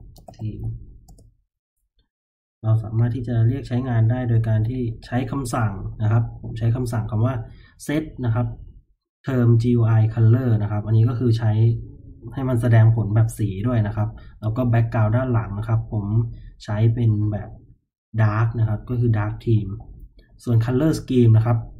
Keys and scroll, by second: 0.0-6.5 typing, 17.5 j, 20.1 j, 20.3 j.